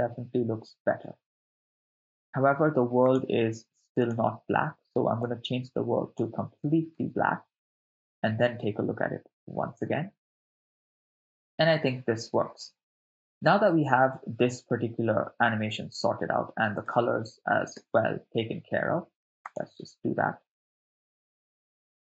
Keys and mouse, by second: 2.1 shift+space, 3.2 click, 4.0 click, 7.0 shift+space, 16.4 shift+space, 17.0 shift+space, 17.8 shift+space, 19.5-20.7 drag, 21.2 shift+space.